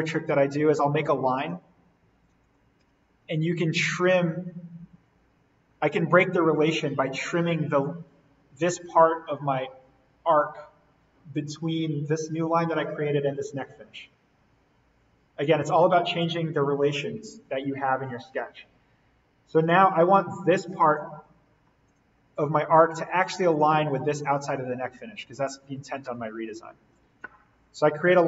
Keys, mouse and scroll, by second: 0.8 l, 2.8 Escape, 3.5 t, 4.9-5.7 scroll down 1, 13.9 click, 15.4 Escape, 16.1 click, 16.9 Delete, 18.0-19.6 scroll up 1, 19.6-21.2 drag, 21.2-21.8 scroll down 1, 21.8 click, 22.3 l, 23.5 click, 26.2 Escape, 28.0 click.